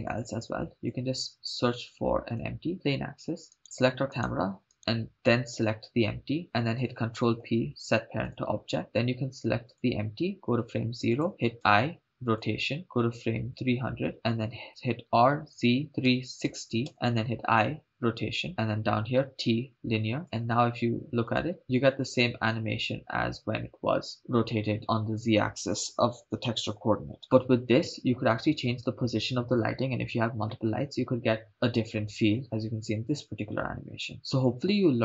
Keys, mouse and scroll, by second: 0.8 shift+a, 4.1 right click, 6.4 ctrl+click, 7.7 ctrl+p, 9.9 click, 11.3 click, 11.9 i, 13.8 click, 14.1 Left, 14.8-18.5 typing, 17.5 Return, 19.6 t, 20.2 shift+space, 21.5 click.